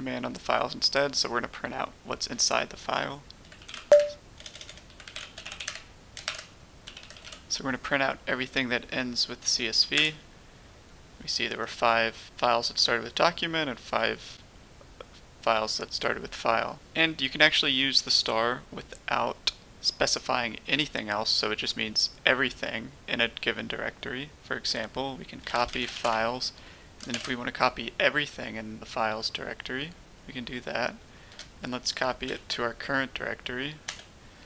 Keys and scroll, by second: 3.3-7.1 typing, 3.8 Tab, 5.6 Tab, 9.9 Return, 25.3-25.9 typing, 27.0 typing, 31.2-32.2 typing, 33.8 Return.